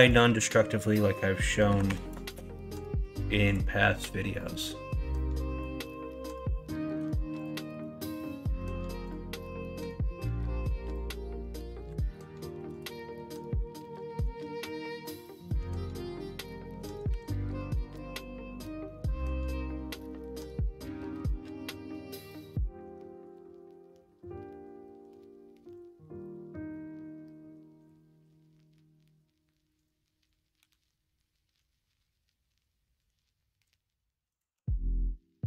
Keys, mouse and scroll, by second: 2.2 Return, 2.2 click, 3.8 middle click, 4.4 middle click, 5.2 middle click, 6.9 x, 7.6 shift+a, 13.8 middle click, 14.4 Tab, 15.5 r, 18.7 middle click, 19.6 shift+middle click, 20.3 middle click, 21.1 KP_1, 21.5 KP_3, 22.8 Tab.